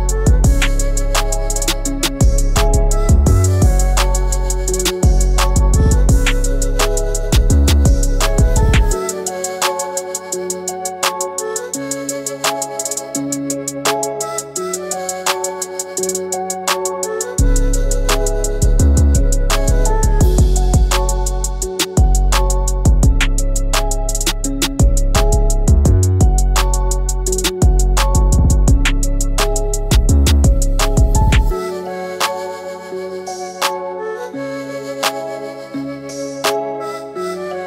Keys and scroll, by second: 13.1 ctrl+g, 13.7 ctrl+alt+g, 14.8 ctrl+alt+g, 25.1 ctrl+shift+].